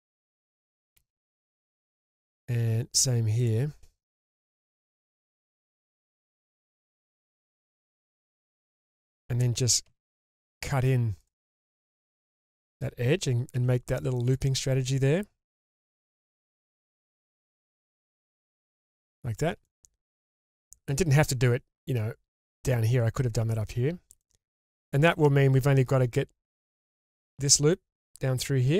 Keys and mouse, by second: 1.0 m, 2.0 middle click, 2.9 click, 3.4 shift+click, 4.8 m, 6.2 drag, 6.6-7.0 shift+drag, 8.2 m, 8.7 middle click, 9.9 k, 13.5 1, 15.6 g, 16.2 g, 16.5 click, 17.1 click, 17.6 g, 17.7 g, 18.5 click, 19.7-20.1 shift+middle drag, 20.3 middle click, 24.2 middle click, 24.8-25.1 shift+middle drag.